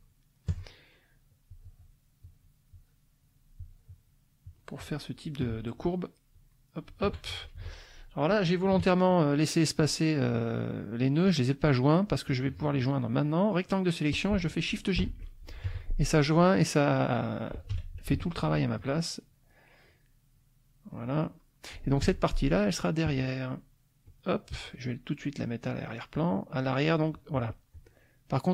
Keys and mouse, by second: 1.5 shift+click, 2.2 shift+click, 2.7-4.2 shift+drag, 4.4 shift+click, 6.3 shift+click, 6.8 shift+click, 7.6 shift+F2, 12.2-13.9 drag, 15.0 shift+j, 15.6 shift+F1, 17.7 F2, 18.3 ctrl+click, 18.7 ctrl+click, 19.3 ctrl+click, 19.8 click, 20.3 click, 21.2 middle click, 22.1 F1, 24.1 click, 25.6 click, 26.1 click, 26.5 click, 26.9 click.